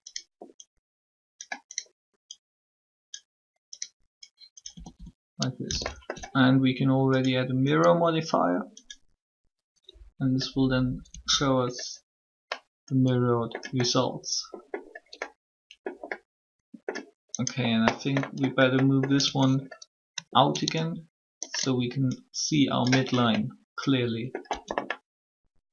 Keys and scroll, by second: 4.6 typing, 11.1 Tab, 19.2 Tab, 24.4 Tab.